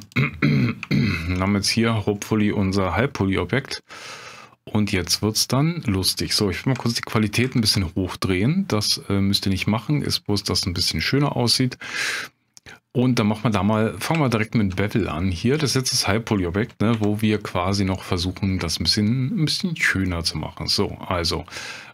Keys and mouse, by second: 0.1 click, 1.0 shift+drag, 1.4 drag, 3.8 click, 7.4 alt+v, 9.6-10.0 drag, 12.0 click, 14.2-14.6 shift+middle drag, 15.1 middle drag, 16.9 q.